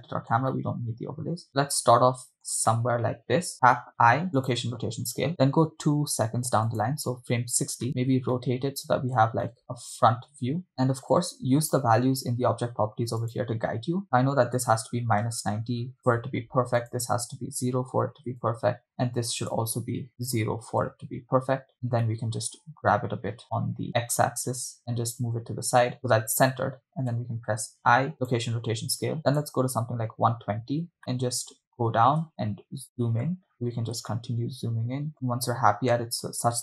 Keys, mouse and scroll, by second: 0.8 middle click, 1.5 shift+middle click, 3.0 middle click, 4.3 i, 7.2 click, 7.9 middle click, 8.5-8.9 shift+middle drag, 9.6 middle click, 10.7 shift+middle click, 10.9 shift+middle click, 13.2 click, 14.6-16.3 drag, 17.6-18.6 drag, 20.6 click, 22.1 shift+middle click, 27.8 i, 30.3 click, 31.0-31.6 shift+middle drag, 32.7 ctrl+middle click, 33.5-33.9 ctrl+middle drag, 34.4 ctrl+middle click, 35.4 middle click.